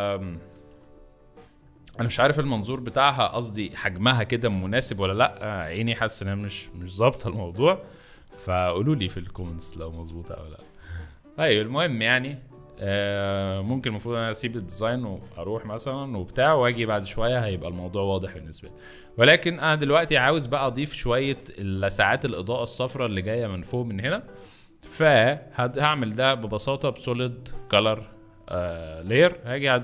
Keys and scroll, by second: 0.7 space, 2.0 z, 4.9 v, 10.7 shift+z, 12.1 shift+space, 18.1 r.